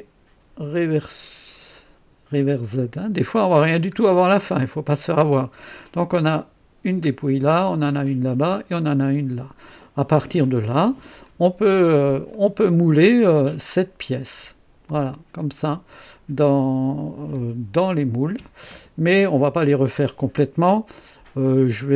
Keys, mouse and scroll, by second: 0.7 click, 2.7 click, 4.1-5.0 right drag, 5.4 scroll up 1, 7.2 scroll down 1, 9.2-9.6 scroll down 1, 11.2 click, 12.3 click, 15.1 click.